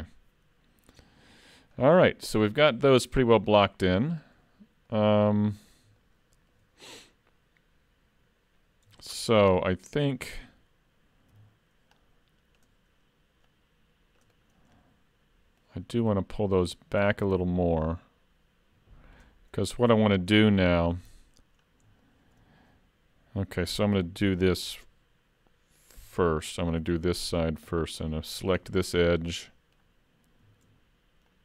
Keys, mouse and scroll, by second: 0.1 middle click, 1.7 scroll down 2, 2.1 shift+middle click, 3.6 middle click, 4.9 middle click, 6.0 shift+middle click, 8.7 scroll up 2, 9.0 shift+middle click, 9.5 Tab, 9.9 middle click, 11.4 c, 14.8 middle click, 16.4 click, 19.4-20.0 scroll up 2, 19.8 middle click, 20.6 shift+middle click, 21.1 scroll up 1, 21.2 middle click, 21.6-22.1 scroll down 2, 22.1 shift+middle click, 26.0 2, 26.8 alt+a, 28.2 alt+click, 28.6 middle click, 31.3 alt+shift+click.